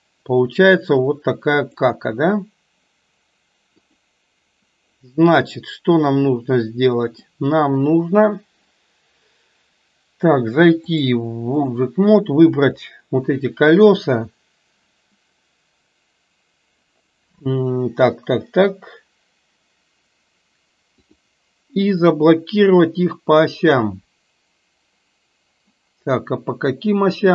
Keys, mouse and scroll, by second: 1.7 click, 3.9 click, 5.7-7.3 middle drag, 10.9-11.8 drag.